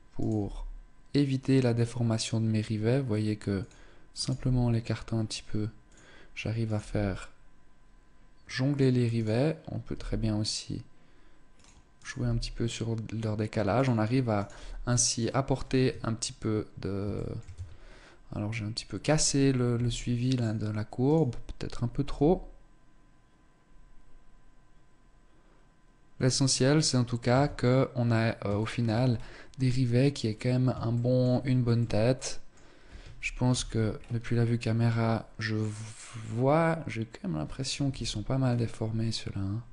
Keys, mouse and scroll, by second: 0.0 g, 3.8 right click, 3.9 g, 5.5 click, 6.3 right click, 6.5 g, 8.4 click, 8.7 right click, 9.5 g, 11.3 click, 11.6 right click, 11.8 g, 13.4 click, 13.9 right click, 14.1 g, 15.0 scroll down 2, 15.4 Tab, 16.3 shift+middle click, 16.8 Tab, 17.3 scroll up 2, 18.1-18.6 scroll down 1, 18.7 right click, 19.4 s, 20.7 right click, 21.7 g, 26.9 Tab, 27.3-27.7 scroll down 2, 28.2 shift+middle click, 28.7-29.2 scroll up 3, 29.9-30.3 scroll down 1, 30.5 shift+middle click, 30.9 middle click, 33.1 KP_0, 33.5-33.9 scroll up 4, 37.5 KP_1.